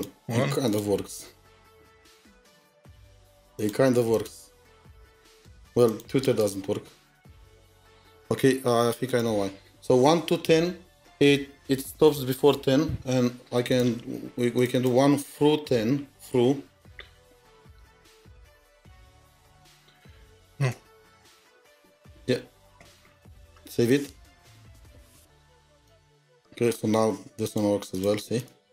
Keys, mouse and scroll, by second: 3.0-3.6 scroll down 2, 3.6 double click, 4.1 double click, 4.6 double click, 6.4 double click, 14.7 double click, 18.2-22.8 typing, 24.3 typing, 27.9 typing, 27.9 double click, 28.4 double click.